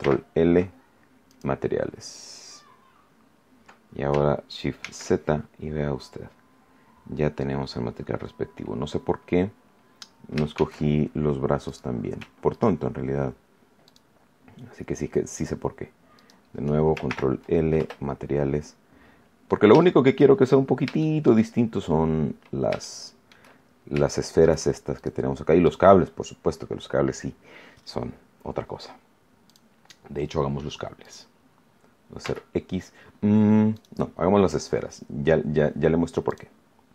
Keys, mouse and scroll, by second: 1.2 click, 4.7 shift+z, 5.8-6.3 scroll down 2, 6.8-7.2 scroll down 2, 7.6-8.1 scroll up 2, 8.2 scroll up 2, 9.4 scroll down 2, 10.5 shift+z, 11.6 right click, 12.5 shift+right click, 13.8 shift+right click, 16.1 shift+right click, 17.0 ctrl+shift+l, 17.7 ctrl+Return, 18.6-19.2 scroll down 2, 19.7 shift+middle click, 20.3-20.8 shift+scroll up 3, 20.8 shift+middle click, 22.4 scroll down 2, 22.7 shift+middle click, 23.6-24.0 shift+scroll up 2, 24.0 shift+middle click, 24.9 right click, 25.6 right click, 29.4 click, 31.0 right click, 32.1 x, 33.7 right click, 36.2 click.